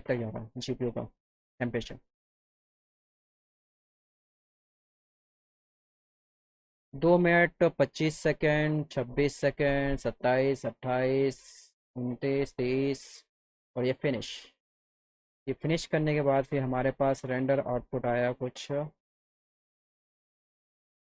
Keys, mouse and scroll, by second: 16.3 click, 19.9 click.